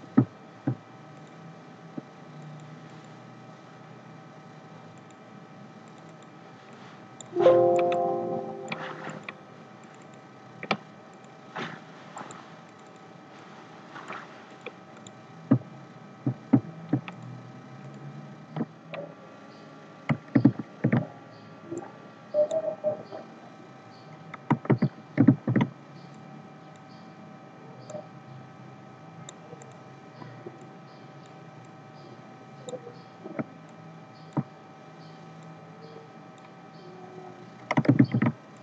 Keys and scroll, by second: 20.3 ctrl+c, 20.8 ctrl+g, 24.7 ctrl+z, 25.2 ctrl+c, 25.4 ctrl+f, 37.9 ctrl+c, 38.1 ctrl+f.